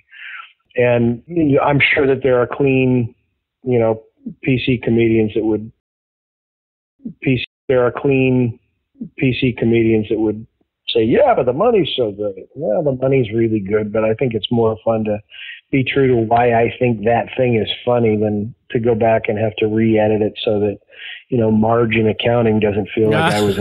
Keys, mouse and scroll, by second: 2.6 ctrl+s, 4.2-5.7 drag, 5.7 space, 6.3 ctrl+shift+Delete, 6.9 space, 7.3 space, 7.5 click, 9.7 ctrl+s, 12.3 click.